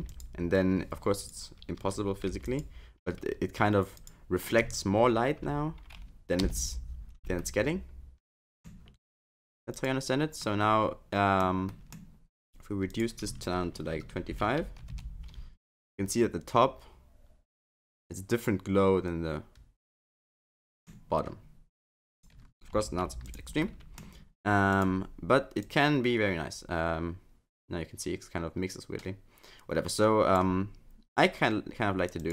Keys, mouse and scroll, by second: 7.4 middle click, 9.8 click, 10.4 middle click, 11.7 middle click, 12.9 click, 15.7 middle click, 22.2 click, 23.6 middle click, 24.7 click, 32.2 click.